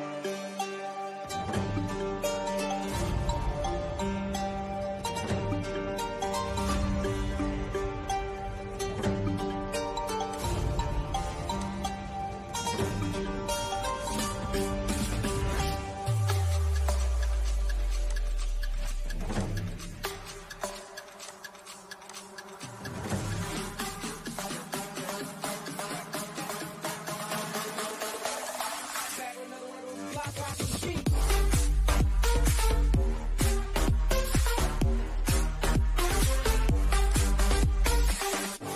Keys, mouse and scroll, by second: 0.9-9.3 middle drag, 9.3 click, 12.8 click, 14.5 scroll up 1, 15.5-17.0 middle drag, 17.0 click, 22.6 middle click, 23.3 scroll up 1, 24.4-27.4 shift+middle drag, 27.4 click, 28.0 scroll up 1, 29.1 click, 30.4 Up, 36.0 click, 37.3 Right.